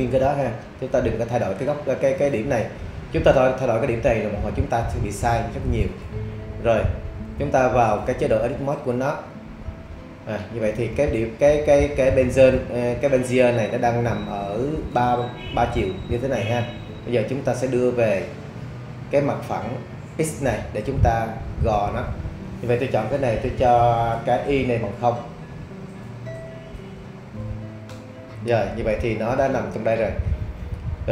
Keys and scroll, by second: 27.4 0, 27.9 Return.